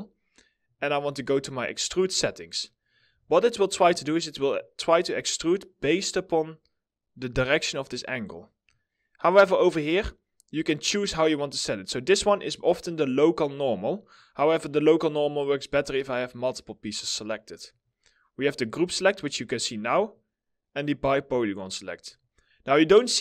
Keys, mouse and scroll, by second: 2.2 middle click, 2.5 scroll down 1, 2.9 alt+middle click, 12.4 middle click, 12.8-13.3 scroll up 1, 13.5 middle click, 13.8-15.8 scroll up 1.